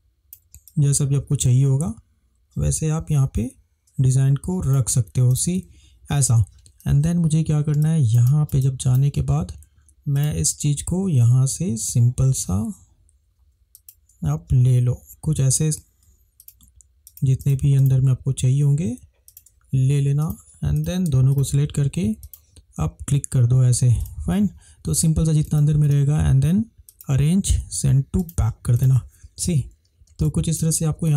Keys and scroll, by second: 7.0 ctrl+=, 9.5 ctrl+=, 30.2 space.